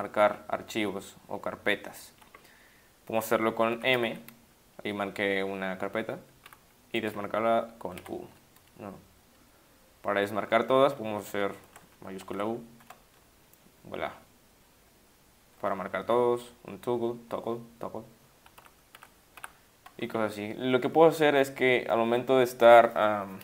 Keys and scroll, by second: 4.0 shift+m, 8.0 shift+u, 11.7 Caps_Lock, 12.3 u, 16.1 t, 18.6-19.4 typing.